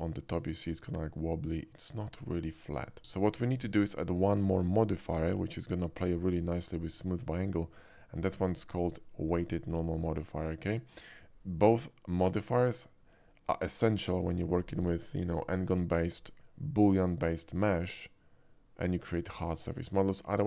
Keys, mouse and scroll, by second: 1.3-2.9 shift+middle drag, 3.2 shift+middle click, 5.1 shift+click, 9.3 click.